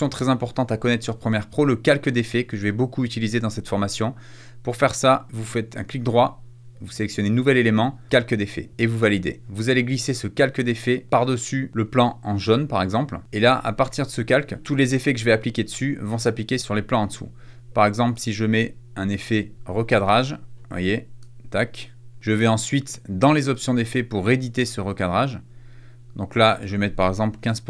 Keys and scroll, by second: 19.5 a, 27.0-27.6 typing.